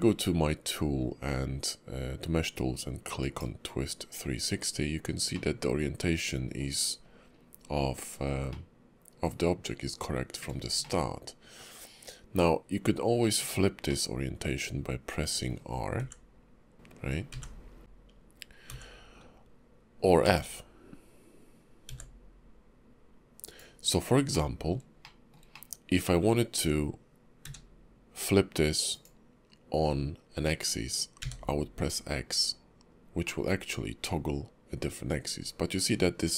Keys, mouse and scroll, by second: 6.1 middle click, 9.6 shift+middle click, 12.4 ctrl+middle click, 15.4 middle click, 24.3 middle click, 25.0 shift+middle click, 25.5 middle click, 27.4 q, 35.0 middle click.